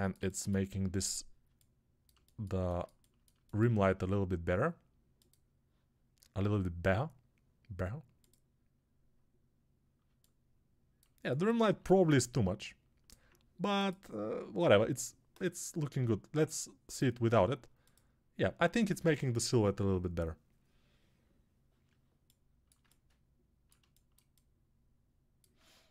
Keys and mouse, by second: 6.2 g.